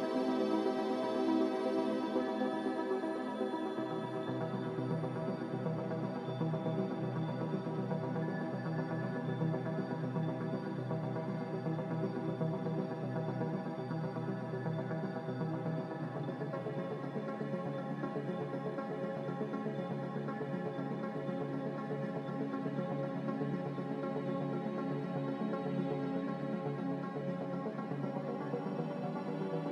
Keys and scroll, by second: 15.7-16.6 typing, 26.6 ctrl+z.